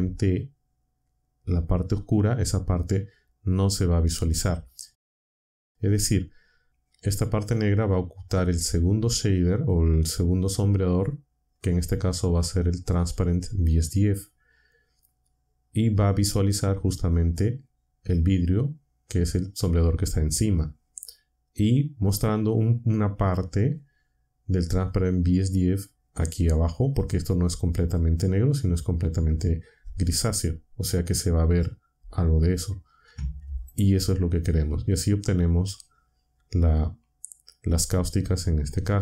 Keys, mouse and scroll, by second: 33.6 ctrl+shift+click.